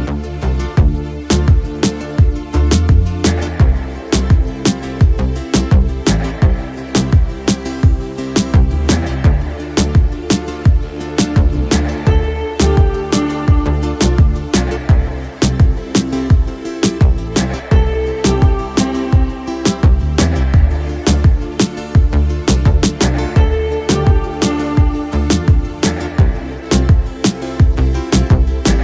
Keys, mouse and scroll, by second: 0.3-1.3 middle drag, 2.6-6.3 middle drag, 6.6-8.9 middle drag, 9.4-11.3 middle drag, 11.9-14.9 middle drag, 15.9-16.5 middle drag, 16.9-17.6 middle drag, 18.7-20.7 middle drag, 22.1-23.4 middle drag, 23.6 z, 24.6 KP_5, 25.9 click, 26.3 click, 27.2 middle click.